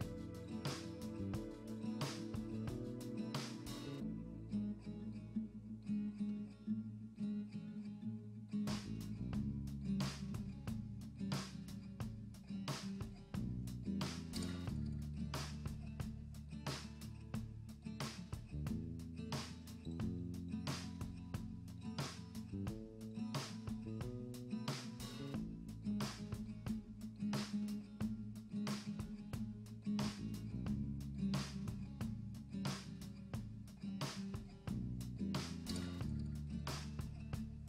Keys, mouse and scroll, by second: 1.2 click, 1.6 click, 2.1 click, 2.2 click, 3.3-4.1 scroll down 2, 4.1 click, 4.9-5.5 middle drag, 5.5 alt+h, 5.7 middle drag, 6.0 click, 7.8 scroll down 2, 7.9 scroll up 1, 8.1-9.0 middle drag, 9.0 scroll down 1, 9.1 scroll up 1, 9.1 scroll down 1, 9.2-9.8 middle drag, 9.8 KP_0, 10.5 click, 12.6 click, 12.8 click, 13.1 click, 13.5 KP_0, 14.1 z, 14.4 click, 14.7 click, 15.5 click, 15.7 click, 15.8 click, 16.1 KP_0, 16.1 KP_0, 17.1 shift+d, 17.5-18.1 drag, 18.1 r, 19.5 click, 20.1 click, 20.4 scroll down 1, 20.6 click, 20.7 click, 21.0 click, 21.6 click, 23.7 click, 24.4 shift+d, 24.5 r, 25.5 click, 26.2 shift+d, 26.4 r, 27.6 click, 28.6 shift+middle drag, 28.8-29.1 scroll down 3, 29.1 scroll up 1, 29.3 middle click, 29.4 scroll down 2, 29.5 scroll up 1, 29.5 middle drag, 29.7 r, 31.0-32.2 middle drag, 32.2 click, 32.3-32.7 middle drag, 32.7 scroll up 1, 32.8 middle click, 32.9 r, 33.2 middle drag, 33.3 scroll up 1, 33.3 g, 33.9-34.3 middle drag, 34.3 drag, 34.4-34.8 middle drag, 34.8 scroll up 1, 34.8 r, 35.8 click, 36.0 click, 36.4 n, 36.6 n, 37.0 click, 37.4 click.